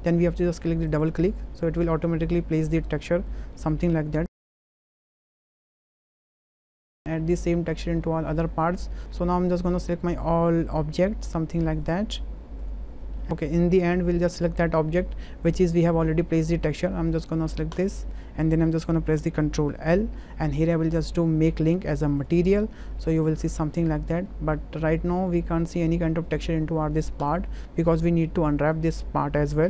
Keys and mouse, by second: 0.9 click, 1.8 middle drag, 3.0 middle click, 3.5 shift+middle click, 3.8-4.2 middle drag, 4.6-5.3 shift+middle drag, 7.7 Tab, 8.0 middle click, 8.9 middle click, 10.3 shift+drag, 10.6 shift+drag, 11.2 shift+drag, 11.9 shift+click, 13.0 click, 19.8 ctrl+l, 22.9-23.3 drag, 24.3 click, 25.3 shift+middle click.